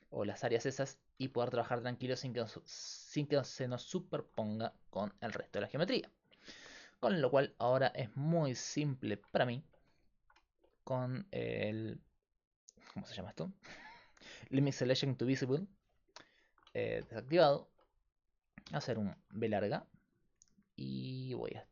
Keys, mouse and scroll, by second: 8.3 middle click, 9.4-10.9 middle drag, 11.3-16.4 right drag, 12.1-16.4 drag, 16.4 middle click, 18.7 b.